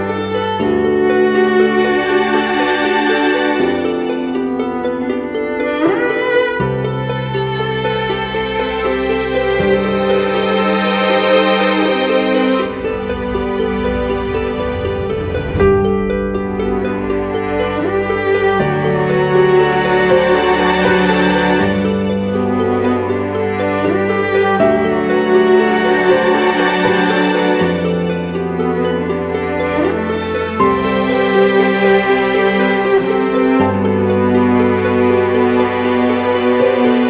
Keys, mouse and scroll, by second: 0.8 double click, 7.2 double click, 15.4 ctrl+t, 16.3 alt+shift+click, 19.0 Return, 19.6 Up, 19.9 Up, 23.0-25.4 scroll down 1, 25.8-26.5 typing, 28.1 ctrl+t, 30.6 ctrl+=, 30.7 ctrl+=, 31.5 space, 34.8 Right, 34.9 Right, 35.2 Down.